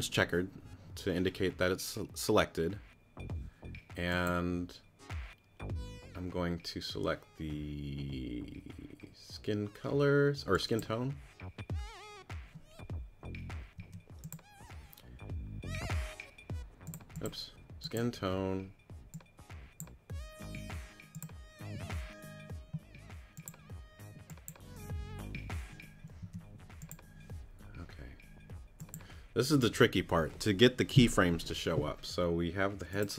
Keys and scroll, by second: 13.8 q, 26.2 q.